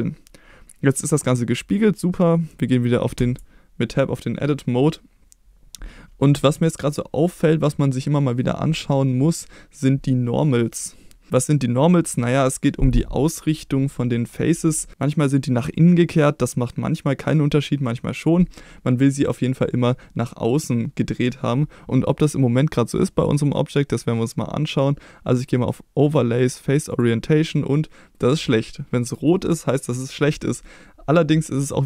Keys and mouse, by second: 3.2 Tab, 25.7-27.4 drag, 30.6-31.8 middle drag.